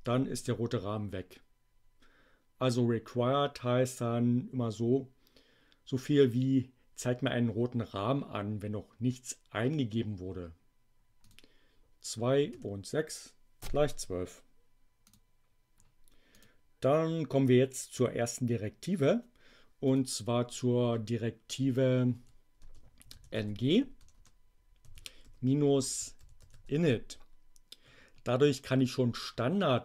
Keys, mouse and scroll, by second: 11.1 click, 12.5 6, 15.1 click, 16.2 click, 19.7 click, 22.2 Left, 22.6-27.0 typing.